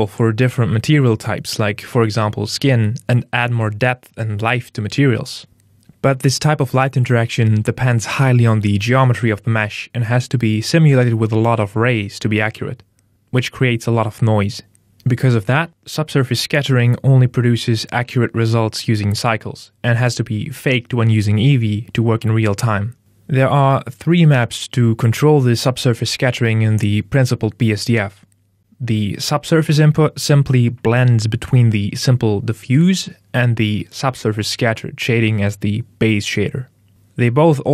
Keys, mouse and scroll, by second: 5.6 click, 9.5 middle click, 11.1 scroll up 3, 28.6 click, 35.6 click.